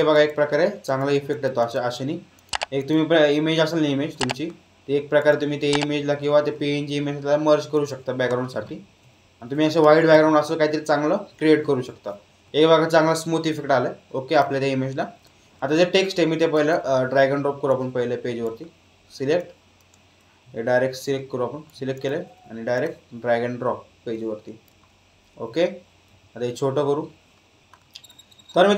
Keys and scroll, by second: 26.1 ctrl+t.